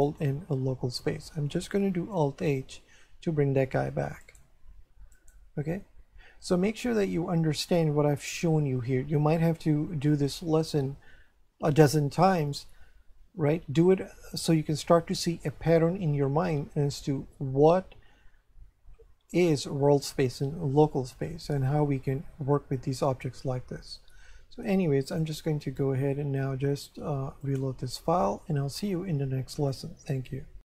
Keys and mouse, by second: 2.6 alt+h, 4.2 right click, 25.1 click, 27.4 click.